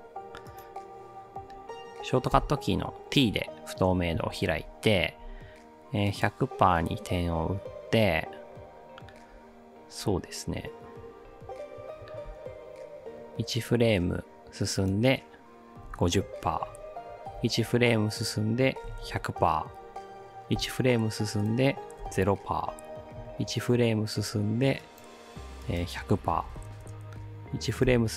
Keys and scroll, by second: 2.3 t, 12.3 ctrl+alt+Right, 15.6-16.4 typing, 17.3 ctrl+Right, 18.6-19.6 typing, 20.6 ctrl+Right, 22.0 0, 22.2 Return, 23.2 ctrl+Right, 26.1-27.1 typing, 27.9 ctrl+Right.